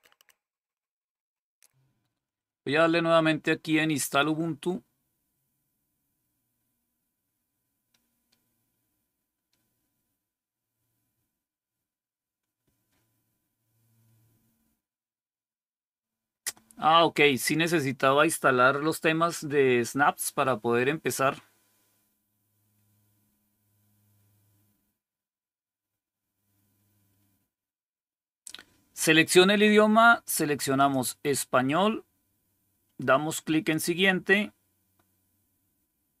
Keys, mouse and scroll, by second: 1.3 click, 2.0 click, 2.3 click, 30.7 click, 33.6 click.